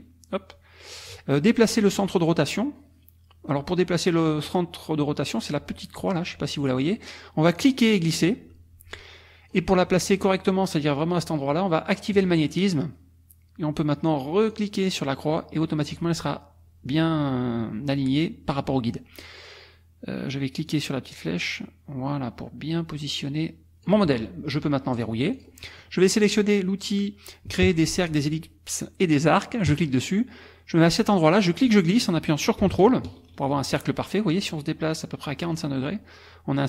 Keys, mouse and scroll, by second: 7.6-9.7 drag, 12.1 click, 14.5-16.0 drag, 20.7 click, 24.9 click, 25.4 click, 29.7 click, 31.3-32.6 drag, 35.3-36.6 ctrl+drag.